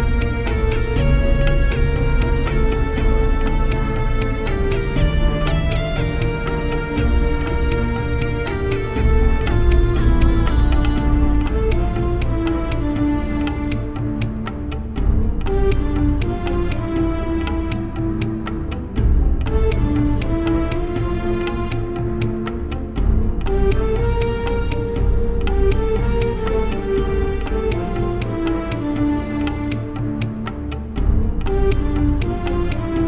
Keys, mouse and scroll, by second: 0.1 Tab, 0.7 middle click, 4.0 Tab, 4.7-11.3 right drag, 7.7-9.7 middle drag, 9.8-11.4 middle drag, 11.3 shift+e, 12.1 Tab, 15.8-17.0 middle drag, 16.3 Tab, 18.2-20.0 right drag, 19.6-21.8 middle drag, 21.2-22.9 right drag, 21.9 middle click, 23.3-24.7 middle drag, 24.7-26.2 right drag, 26.2-27.2 middle drag, 29.5-32.8 right drag, 32.8-33.0 middle drag.